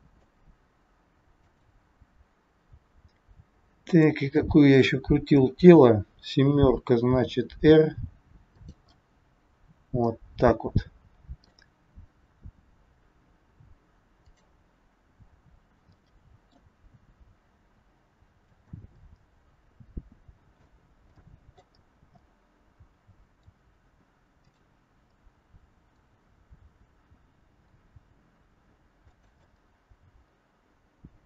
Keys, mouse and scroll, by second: 1.4 click, 2.3-2.9 scroll up 3, 3.9 click, 5.5 KP_7, 7.3 r, 9.0 middle click, 14.1 click, 15.9 middle click, 16.9 r, 19.0 middle click, 21.1 middle click, 21.8 scroll down 1, 22.0 scroll down 2, 22.2 middle click, 24.4 click, 25.0 middle click, 26.5 r, 29.5 middle click.